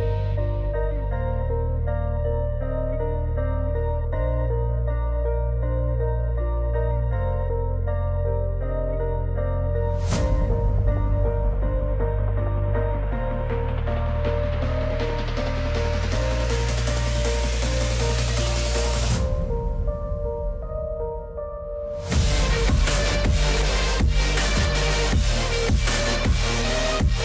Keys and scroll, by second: 4.7 alt+w, 20.9 F4, 24.1 ctrl+z.